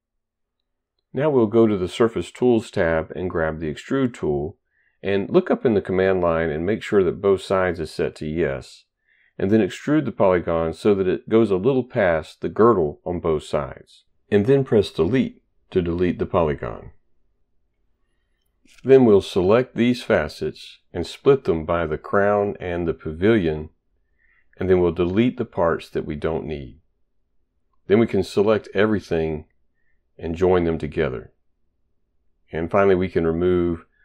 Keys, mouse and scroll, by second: 1.5 click, 3.4 click, 9.8 click, 10.0 click, 10.9 click, 15.0 Delete, 20.6 click, 21.8 click, 22.7 click, 23.5 Return, 25.5 click, 26.0 Delete, 26.5 click, 26.8 Delete, 27.6 click, 28.5 shift+click, 29.2 shift+click, 30.5 click, 31.7 ctrl+right click, 32.0 right click, 33.0 click, 33.7 right click.